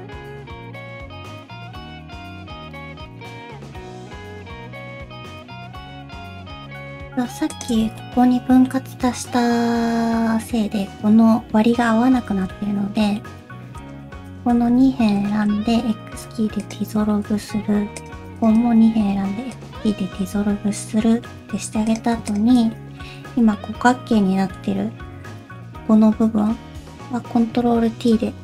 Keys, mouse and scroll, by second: 0.1 click, 0.3 g, 0.8 middle click, 1.1 middle click, 1.7 click, 1.8 g, 2.2 middle click, 2.4 shift+middle click, 2.4 scroll up 3, 2.7 click, 3.1 ctrl+click, 3.2 middle click, 3.5 g, 4.5 scroll down 2, 4.7 middle click, 4.9 scroll up 3, 5.2 middle click, 5.8 alt+z, 5.8 middle click, 6.4 shift+middle click, 6.7-7.0 scroll up 1, 7.0 middle click, 7.5 shift+click, 7.8 alt+z, 8.0 middle click, 9.3-10.5 scroll up 2, 11.9 middle click, 12.3 alt+z, 12.5 middle click, 13.2 middle click, 13.8 click, 14.3 shift+click, 14.7 alt+z, 15.3 shift+middle click, 15.6 x, 17.1 shift+middle click, 17.4 alt+z, 18.0 click, 18.4 shift+click, 19.0 x, 20.1 alt+z, 20.5 scroll down 2, 20.7 middle click, 21.5 3, 21.9 click, 22.3 shift+click, 22.7 middle click, 23.2 alt+z, 23.5 middle click, 24.5 /, 24.9-25.3 scroll up 4, 25.3 alt+z, 25.5 middle click, 27.6 ctrl+t.